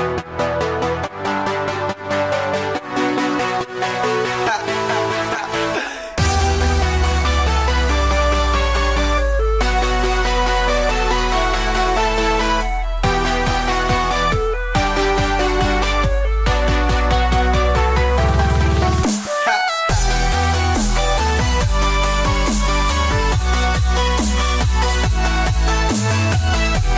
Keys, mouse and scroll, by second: 0.0 ctrl+z, 0.2 ctrl+z, 0.5 ctrl+z, 1.1 ctrl+z, 2.0 ctrl+z, 7.2 right click, 9.2 right click, 9.2 click, 10.3 click, 10.3 right click, 12.3 click, 12.9 middle click, 14.9 ctrl+r, 21.5 ctrl+r, 24.3 ctrl+r, 25.9 ctrl+r.